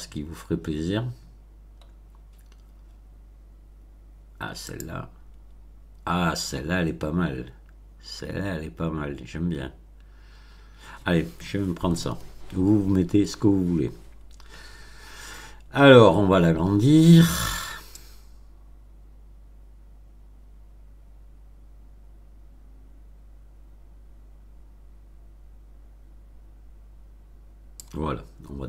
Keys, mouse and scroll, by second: 0.4-1.3 scroll down 4, 1.9-3.1 scroll down 4, 4.6 click, 17.9 click.